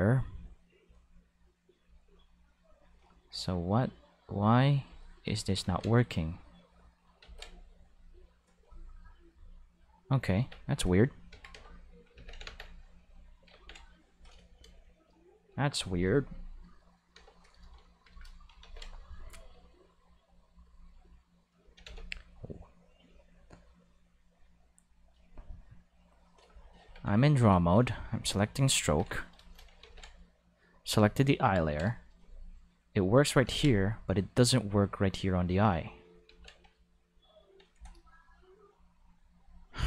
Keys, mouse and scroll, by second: 0.4 middle click, 1.8-2.1 drag, 2.5 click, 4.8 click, 5.6 ctrl+z, 5.7 ctrl+5, 6.1 click, 7.2 ctrl+z, 7.8 click, 8.9 click, 10.3 Tab, 11.3 a, 11.4 5, 11.5 x, 11.6 click, 11.6 5, 12.1 ctrl+5, 13.0 click, 14.1 click, 16.8 right click, 17.1 5, 17.2 click, 18.6 ctrl+5, 20.2 click, 21.8 ctrl+5, 23.0 click, 25.1 click, 26.8 ctrl+Tab, 27.3 click, 28.1 click, 28.8 ctrl+5, 29.5 shift+middle click, 29.8 ctrl+5, 30.9 click, 32.4 click, 33.5 ctrl+z, 33.6 5, 33.9 click, 36.3 ctrl+z, 36.4 ctrl+5, 36.8 ctrl+middle click.